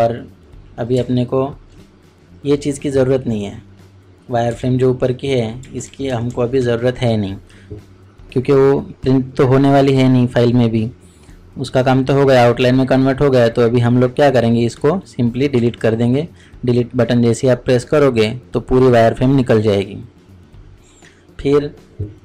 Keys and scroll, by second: 0.9 ctrl+space, 5.5 ctrl+space.